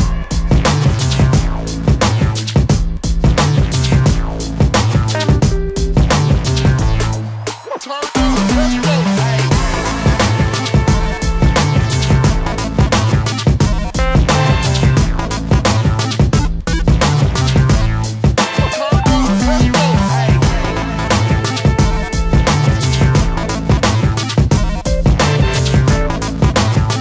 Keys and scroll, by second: 4.2 space, 7.2 g, 21.4 space.